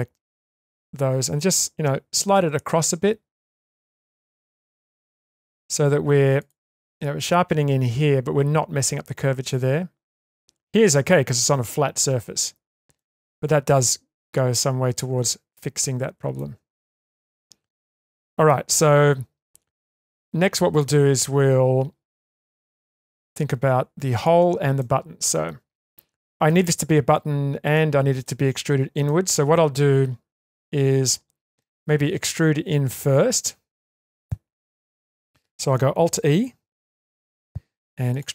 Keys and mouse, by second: 2.3 g, 12.4 Tab, 12.9-16.3 middle drag, 16.6 Tab, 17.7 middle click, 19.4-19.9 middle drag, 20.0-20.8 shift+middle drag, 22.5 3, 24.8-26.4 middle drag, 27.8-28.2 middle drag, 29.0-32.2 middle drag, 33.7 ctrl+middle click, 34.6 shift+middle click, 37.0 alt+e.